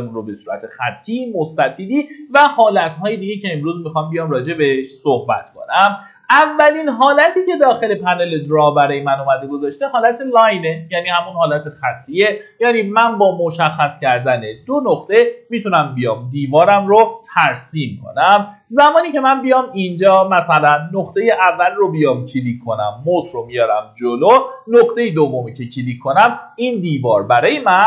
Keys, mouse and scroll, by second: 17.0 middle click, 17.5-18.3 scroll up 1, 20.8 click.